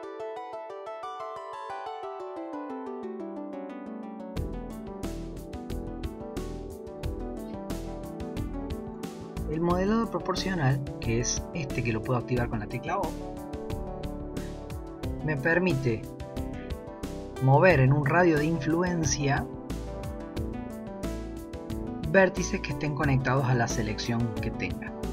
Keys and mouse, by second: 0.1 g, 2.1 ctrl+r, 4.1 shift+middle click, 4.6 shift+middle click, 5.0 ctrl+r, 11.3 click, 13.7 o, 14.0 o.